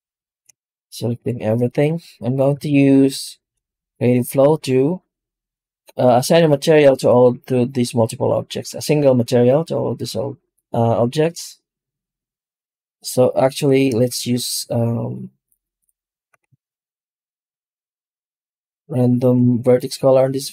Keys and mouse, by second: 0.1 shift+g, 2.5 ctrl+shift+x, 14.0 shift+q, 16.5 shift+right click, 16.8 right click, 17.4 shift+q.